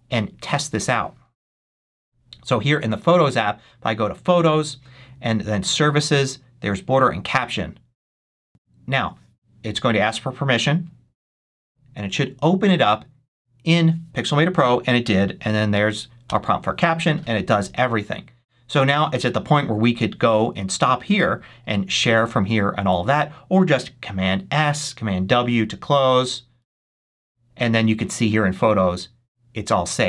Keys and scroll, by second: 16.1 Return, 26.0 super+s, 26.5 super+w.